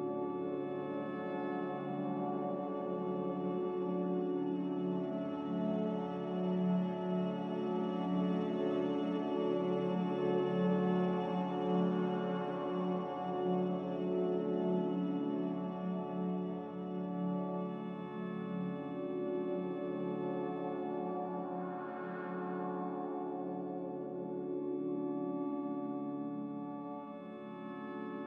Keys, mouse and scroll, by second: 3.1 Escape, 19.3 Delete, 20.3 ctrl+z.